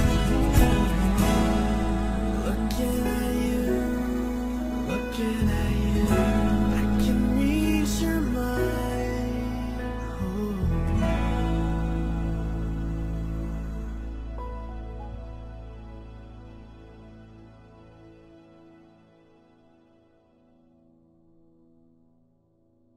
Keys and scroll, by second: 22.0 Return.